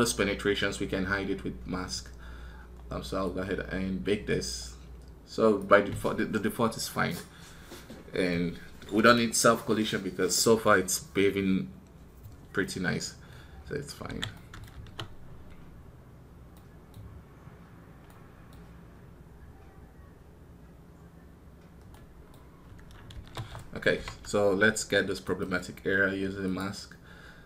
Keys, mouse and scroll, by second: 25.1 right click.